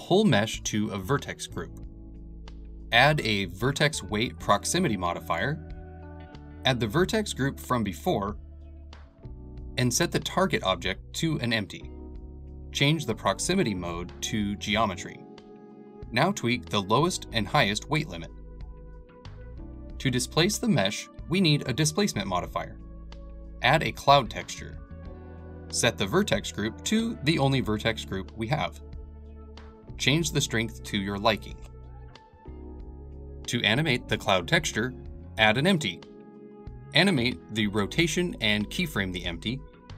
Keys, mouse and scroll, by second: 1.6 Tab, 2.4 scroll up 1, 2.6 middle click, 3.5-8.7 drag, 9.0-16.9 shift+drag, 17.7-19.3 middle drag, 19.3-23.9 drag, 25.9 m, 29.1-32.9 drag, 34.5-37.6 drag.